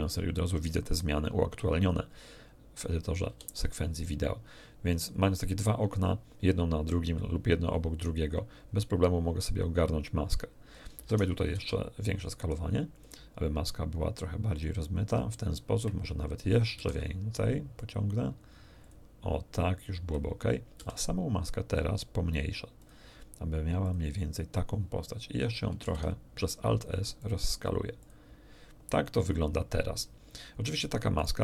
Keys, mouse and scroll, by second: 3.3 g, 5.1 click, 10.9 a, 11.1 a, 11.5 alt+s, 12.9 click, 14.5 click, 16.7 alt+s, 17.7 click, 18.8 click, 20.7 s, 22.7 click, 23.8 click, 25.8 alt+s, 27.1 click, 27.5 middle click, 28.0 click, 31.1 right click.